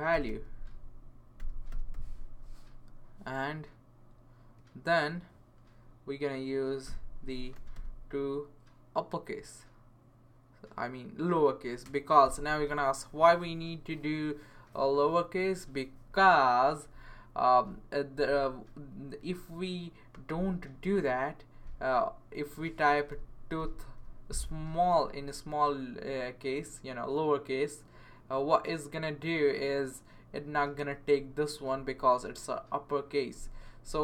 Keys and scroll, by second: 0.0-2.4 typing, 6.6-8.0 typing, 22.8-24.5 typing.